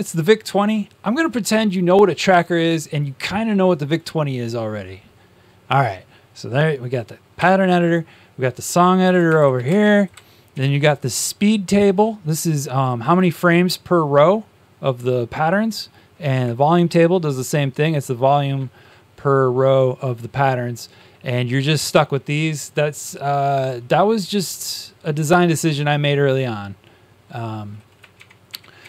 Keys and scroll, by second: 7.3 Tab, 9.3-9.7 typing, 10.5 Tab, 16.2 Tab, 28.1 shift+Tab, 28.4 shift+Tab.